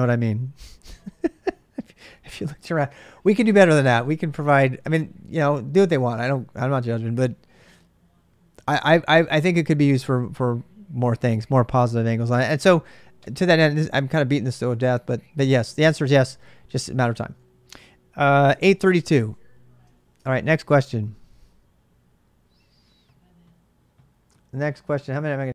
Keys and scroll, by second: 18.1-19.4 typing, 20.0 ctrl+[, 20.4 shift+z, 20.6 shift+z.